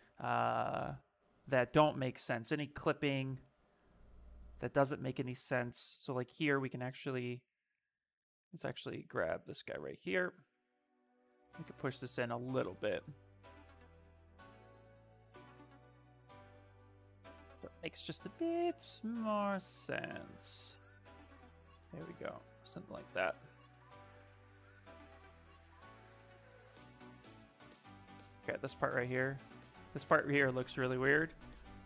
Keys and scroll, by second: 5.2 s, 7.6 shift+f, 9.3 shift+f, 9.9 shift+f, 12.1 shift+f, 12.5 shift+d, 14.8 s, 29.9 shift+f, 30.3 s, 31.7 s.